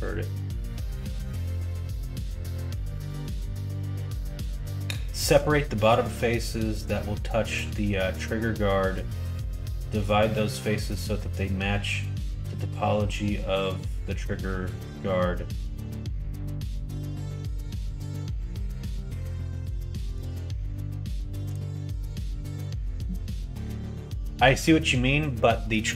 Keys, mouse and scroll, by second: 21.9 middle click.